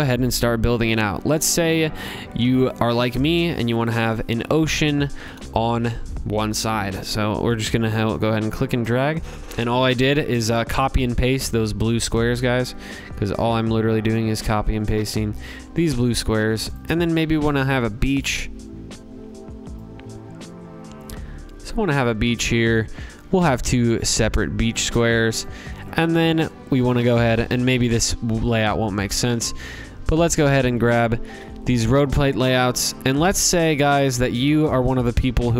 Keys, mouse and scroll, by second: 0.4 click, 0.9 middle click, 0.9 middle click, 1.0 middle click, 2.0 ctrl+c, 2.4 ctrl+v, 2.5 scroll, 3.6 ctrl+v, 4.4 click, 5.1 middle click, 5.2 middle click, 8.2 click, 9.2 click, 9.7-10.9 scroll, 13.3 click, 13.8 click, 14.2-15.1 scroll, 15.7 click, 16.2 scroll, 17.2-17.6 scroll, 18.0 click, 18.4 ctrl+z, 18.5 ctrl+c, 18.5 ctrl+v, 18.5 scroll, 21.1 click, 21.9 ctrl+c, 22.2 ctrl+v, 24.3 click, 25.4 click, 25.8 click, 26.3-27.2 scroll, 29.5 click, 30.0 ctrl+c, 30.3 ctrl+v, 31.5 click, 31.8 ctrl+c, 32.1 ctrl+v, 35.0 click, 35.4 click.